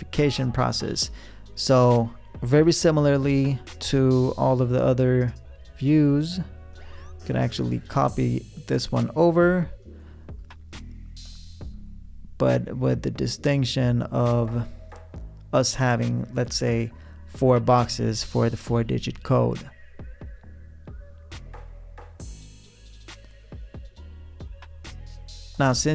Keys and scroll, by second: 3.7 v, 10.9 p, 25.2 v.